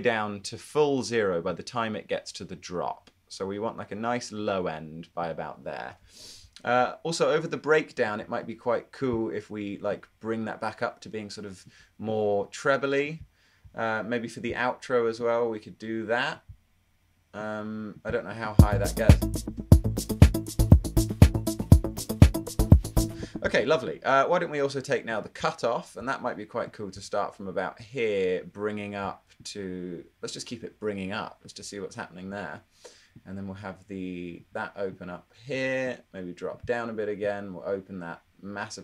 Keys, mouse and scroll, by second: 18.6 space, 19.4 space, 19.6 space, 23.1 space.